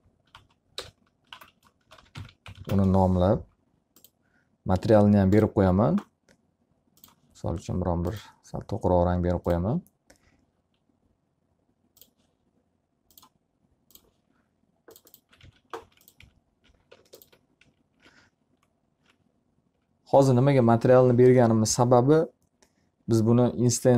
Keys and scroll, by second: 1.1 BackSpace, 15.7 alt+a, 16.9 F3.